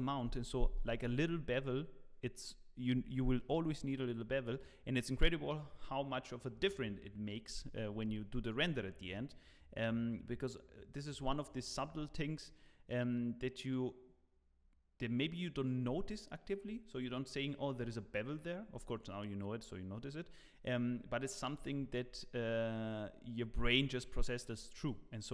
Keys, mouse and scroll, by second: 17.0 scroll down 1.